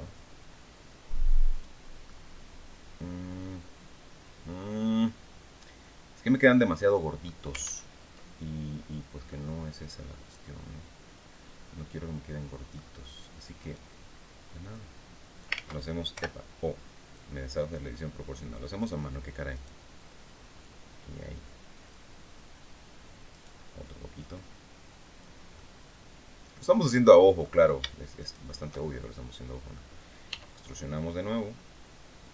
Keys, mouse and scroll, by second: 1.0 click, 1.5-6.9 middle drag, 7.1 ctrl+z, 8.3 scroll down 2, 8.8-12.4 middle drag, 13.1 right click, 14.2 click, 15.1 ctrl+z, 15.6 ctrl+o, 16.6-18.4 drag, 19.0 right click, 20.1-21.6 drag, 22.8 right click, 23.6-24.9 drag, 25.0-27.1 middle drag, 27.7 shift+right click, 28.4 shift+middle click, 28.6 click, 29.7 e, 31.7 click, 32.2 scroll down 2.